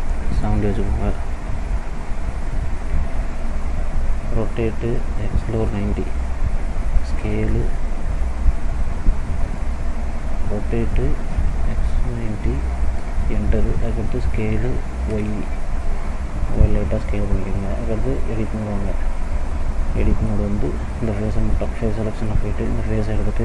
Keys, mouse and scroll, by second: 3.3 click, 4.4 r, 8.9 ctrl+z, 10.5 r, 13.8 s, 18.2 click, 19.6 middle click, 20.8 click, 22.3 click.